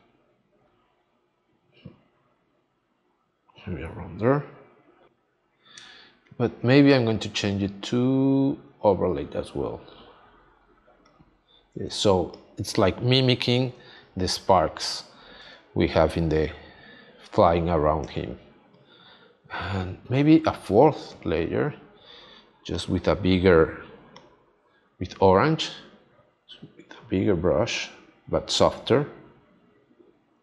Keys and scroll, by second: 11.9 space, 18.0 space.